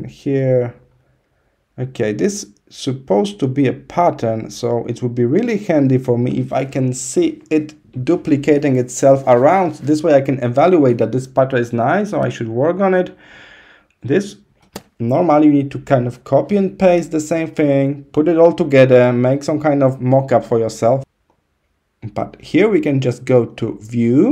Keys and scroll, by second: 12.0 -.